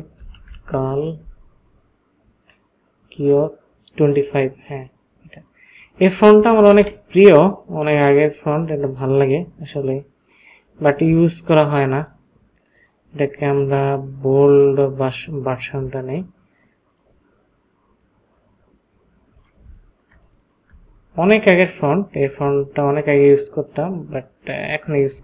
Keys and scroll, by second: 0.1-1.0 typing, 6.7 ctrl+a, 19.6 ctrl+space.